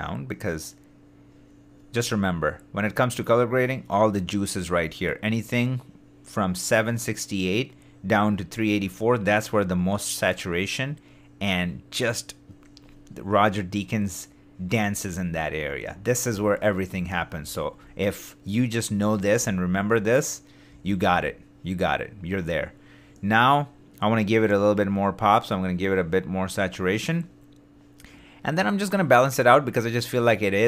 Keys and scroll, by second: 17.1 shift+d, 19.4 shift+d.